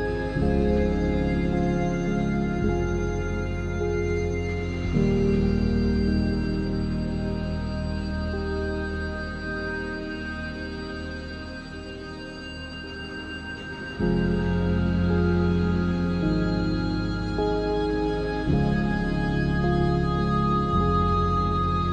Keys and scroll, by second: 1.6 3, 8.7 7, 9.4 z, 10.5 r, 10.8 y, 11.3 Return, 11.6 3, 12.5 Tab, 13.4 r, 15.7 r, 18.1 r, 19.0 r, 19.6 Tab, 19.8 s, 20.6 Tab, 21.7 r.